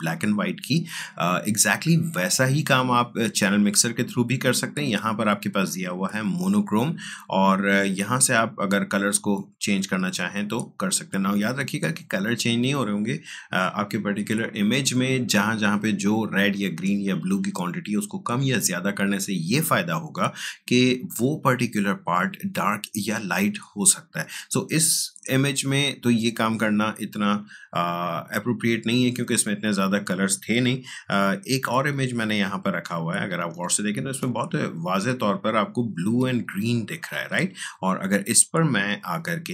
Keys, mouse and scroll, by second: 6.3-14.2 drag, 31.3 ctrl+Tab, 32.2 space, 32.4 click, 32.7 space, 33.6 ctrl+click.